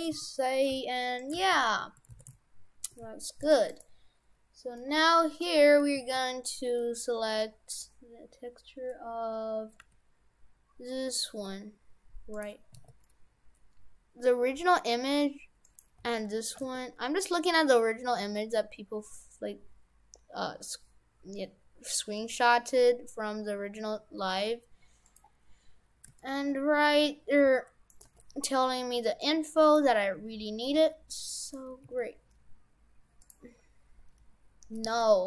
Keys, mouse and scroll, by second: 1.2 right click, 1.6 shift+w, 2.2 shift+f, 3.8 right click, 5.5 middle click, 6.0 a, 6.4 middle click, 7.0-8.3 scroll up 2, 9.8 g, 12.8 s, 16.0 g, 16.6 g, 25.4-26.1 scroll up 6, 26.2 shift+middle click, 27.4 g, 28.0 g, 30.8 s, 31.9 s, 33.4-33.9 scroll down 4, 34.8 s.